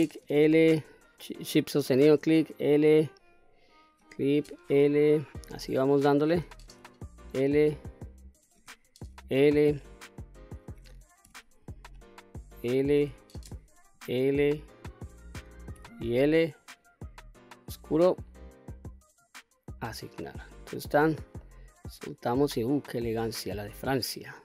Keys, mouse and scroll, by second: 0.0 l, 1.6 shift+click, 2.5 l, 3.5 shift+click, 4.3 l, 5.8 shift+click, 6.6 l, 8.1 shift+click, 8.9 l, 10.3 shift+click, 11.1 l, 12.5 shift+click, 13.3 l, 14.7 shift+click, 15.6 l, 17.4 click, 19.1 click, 20.1-20.5 scroll down 1, 20.6 click, 21.2 scroll down 1, 21.3 middle click, 22.2-22.6 scroll down 1, 22.6 middle click, 23.5-24.1 scroll up 1, 24.1-24.4 scroll down 1.